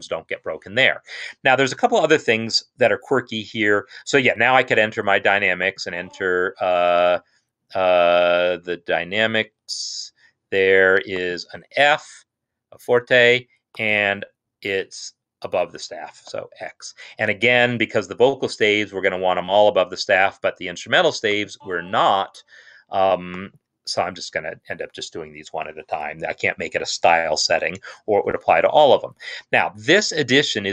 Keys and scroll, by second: 16.3 x, 24.0 x.